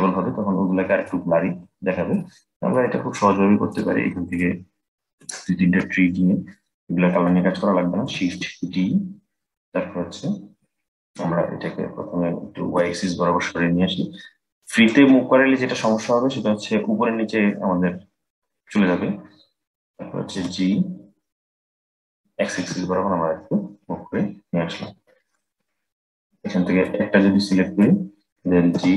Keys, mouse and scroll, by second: 1.1 scroll up 4, 1.9-3.4 shift+middle drag, 3.4 click, 4.0 shift+click, 4.5 shift+click, 8.2 shift+d, 20.0 g, 25.3-26.5 scroll down 2, 26.5 click, 27.4 click, 28.4 g.